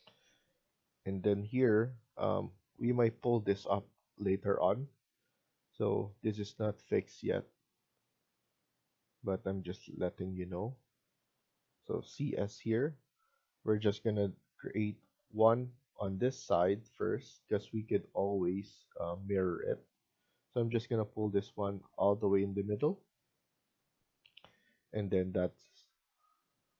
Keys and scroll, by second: 20.7 Escape.